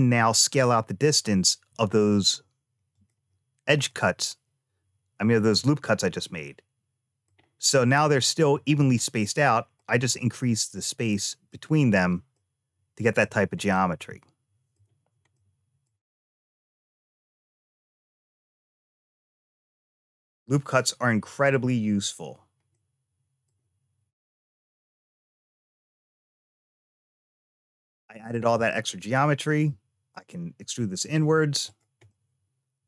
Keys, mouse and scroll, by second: 3.7-7.1 middle drag, 8.6 middle click, 10.2-11.3 middle drag, 12.2 middle click, 13.5-14.6 middle drag, 15.2 shift+middle click, 16.2-18.2 middle drag, 18.8 click, 20.3-21.4 middle drag, 22.5 middle click, 24.0 click, 25.9 3, 26.1 click, 26.9 middle click, 29.5 e, 31.5 click, 31.9-32.8 middle drag.